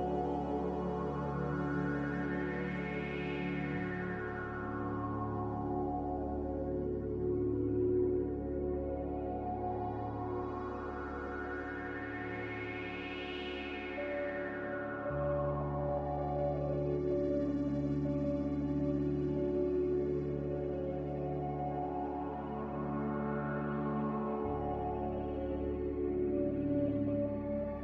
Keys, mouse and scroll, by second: 3.4 z, 7.9 m, 14.1 b, 16.7 Delete, 17.8 Delete, 23.1 a, 25.1 ctrl+z.